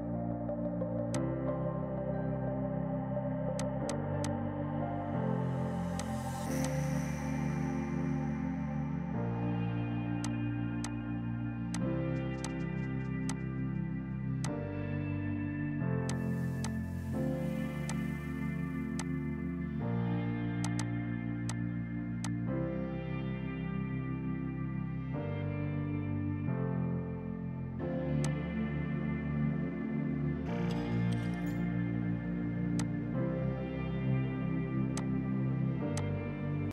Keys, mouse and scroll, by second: 0.3 ctrl+shift+q, 1.2 shift+click, 2.3 r, 3.2 ctrl+z, 3.6 click, 5.5 ctrl+shift+q, 6.0 click, 10.3 shift+click, 10.6 r, 10.8 click, 12.0 ctrl+right click, 12.5 click, 13.3 click, 15.4 z, 16.2 click, 28.1 F2, 28.3 click, 29.1 Down, 30.9 space, 31.7 F3, 32.8 click, 35.3 space, 36.0 click.